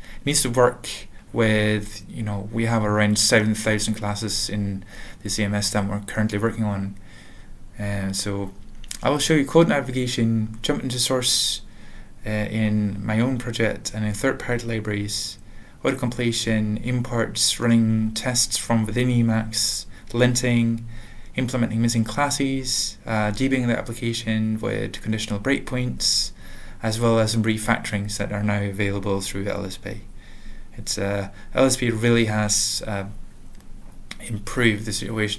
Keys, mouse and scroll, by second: 5.8 typing, 7.3 Right.